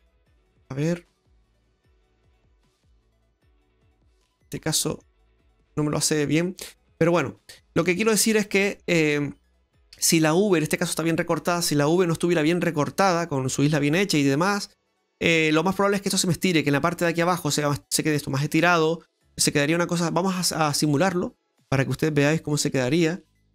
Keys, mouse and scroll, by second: 2.8 middle click, 4.6 middle click, 5.5 middle click, 6.0 g, 7.4 middle click, 8.0-8.4 scroll up 4, 8.5 middle click, 8.8 scroll up 1, 9.0-9.5 scroll down 2, 9.5 middle click, 10.8 middle click, 14.2 middle click, 14.8-15.6 scroll up 2, 15.6 scroll up 1, 20.9 click, 22.3 b.